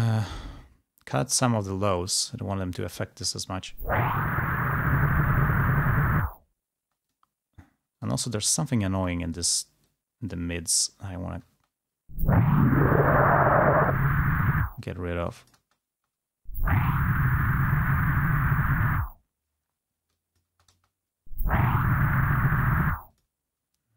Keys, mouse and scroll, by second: 2.4 click, 3.2 space, 4.7-6.3 drag, 7.0 space, 8.2 click, 10.0 click, 10.8-11.7 scroll up 1, 11.7 space, 12.6-14.7 drag, 14.7-15.8 scroll up 1, 15.8 space, 18.0-20.4 scroll up 2, 20.4 click, 20.7 space, 23.0 space, 23.2 click.